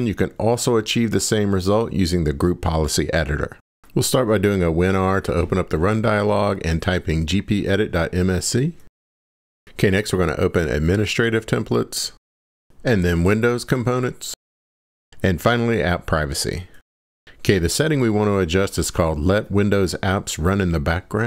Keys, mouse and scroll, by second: 3.8 click, 3.8 super+r, 4.5-7.2 typing.